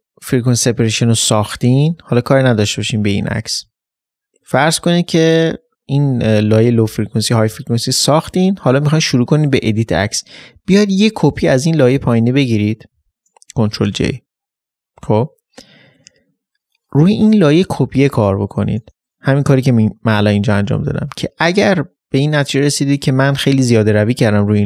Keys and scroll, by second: 2.7 ctrl+z.